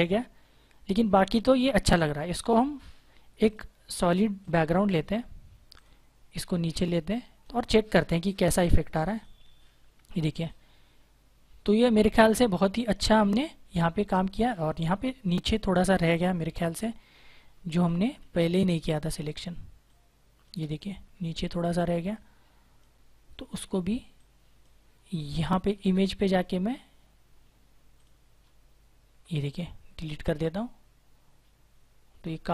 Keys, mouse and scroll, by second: 0.0 ctrl+-, 3.3 click, 17.1 click, 17.5 ctrl+=, 17.7 space, 17.9 click, 18.1 space, 19.7 space, 19.8 click, 19.9 space, 20.7 click, 25.5 ctrl+d, 31.2 click, 32.0 click.